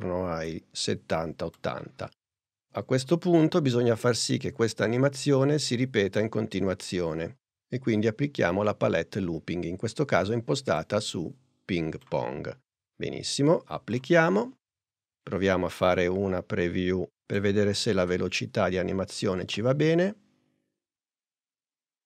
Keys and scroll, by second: 17.9 n, 19.5 space.